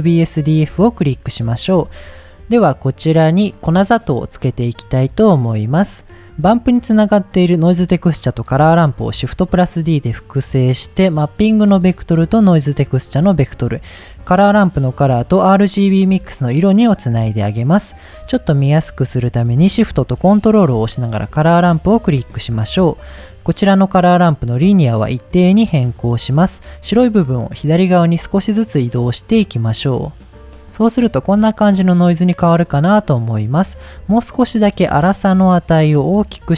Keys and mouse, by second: 1.4-1.7 middle drag, 5.1 middle click, 7.3-7.7 drag, 8.8 shift+d, 9.6 click, 9.9 middle click, 11.4-12.5 drag, 12.8 middle click, 13.8-15.5 drag, 16.4 middle click, 21.7 middle click, 24.2-25.4 drag, 27.4-30.5 drag, 30.7-31.3 middle drag, 31.7 middle click, 33.5 middle click, 34.9-36.5 drag.